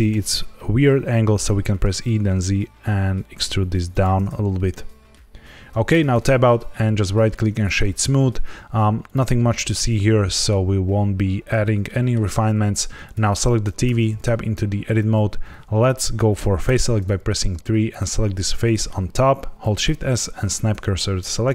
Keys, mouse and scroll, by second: 1.7 e, 2.0 z, 3.8 click, 4.2-4.6 scroll down 3, 4.6 middle click, 5.8 Tab, 6.1 right click, 9.0 click, 9.8 middle click, 11.5 scroll down 2, 11.8 shift+middle click, 13.0 click, 13.8 Tab, 16.6 3, 17.8 click, 18.6 middle click, 19.5 shift+s.